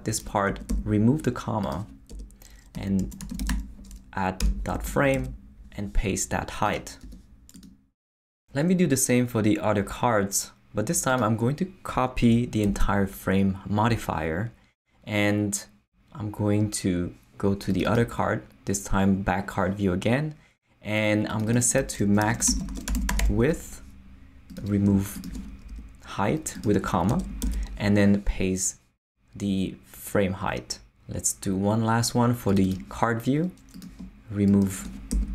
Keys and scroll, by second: 0.5 super+BackSpace, 2.1 Return, 2.5-4.0 typing, 4.4 Return, 4.7 Left, 5.1 super+v, 7.0 Tab, 12.6 super+c, 22.0-23.7 typing, 25.7 shift+BackSpace, 26.4 BackSpace, 27.1 Return, 27.4 super+v, 35.1 shift+BackSpace.